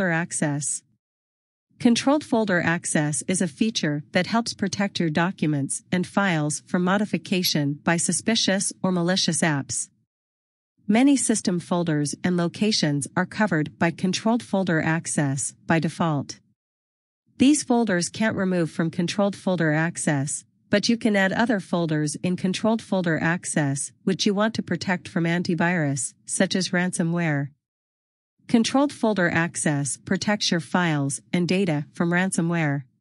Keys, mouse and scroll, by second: 29.1 scroll down 1.